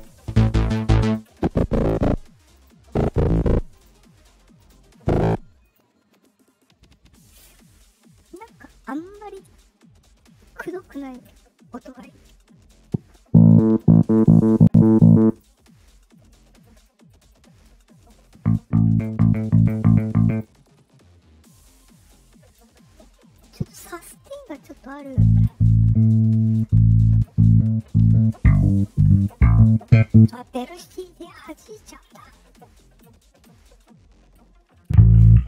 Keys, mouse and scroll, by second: 1.0 click, 2.5 click, 3.7 click, 4.5 click, 5.6 click, 10.8 click, 15.2 click, 20.2 click, 31.3 click.